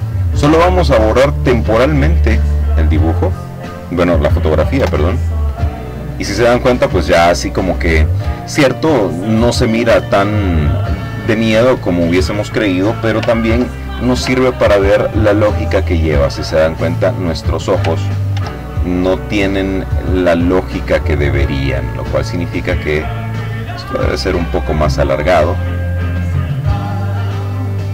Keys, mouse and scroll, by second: 0.7 click, 3.3 Delete, 14.1-15.3 ctrl+drag, 16.8 ctrl+z, 19.1 click, 20.4-23.0 drag, 25.8-27.9 drag.